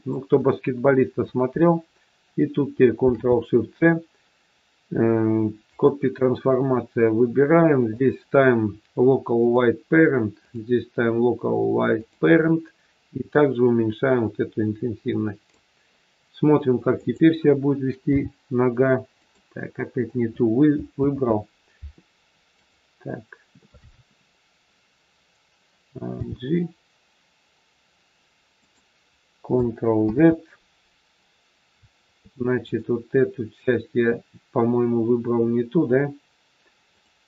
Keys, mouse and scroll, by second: 2.9 ctrl+shift+c, 6.5 scroll down 2, 8.0 click, 8.0-8.7 scroll down 4, 10.4 click, 16.9 click, 18.1 g, 21.0 ctrl+z, 22.5 click, 26.1 g, 30.0 ctrl+z, 32.5 click, 36.7 click.